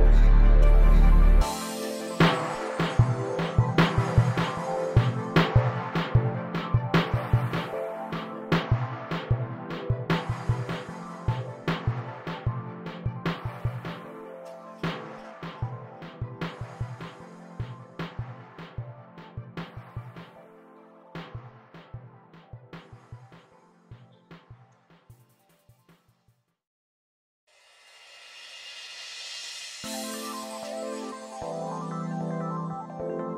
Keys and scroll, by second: 3.4 super+c, 11.4 o, 13.1 o, 13.9 space, 30.1 p.